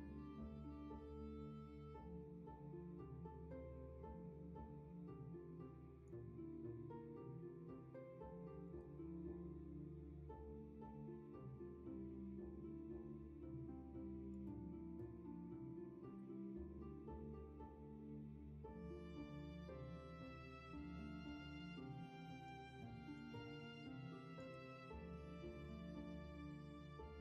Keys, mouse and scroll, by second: 1.1 ctrl+z, 16.7 w, 20.1 ctrl+z.